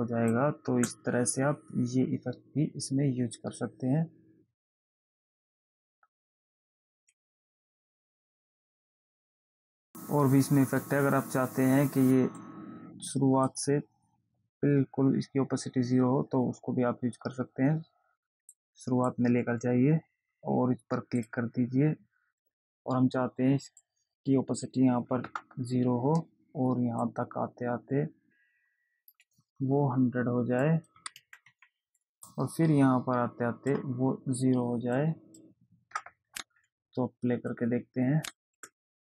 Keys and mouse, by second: 1.0 space, 8.5 click, 9.4 click, 12.8 click, 18.8 click, 21.5 click, 24.2 click, 27.4 click, 31.0 click, 32.6 click, 35.3 click, 37.8 click, 38.8 space.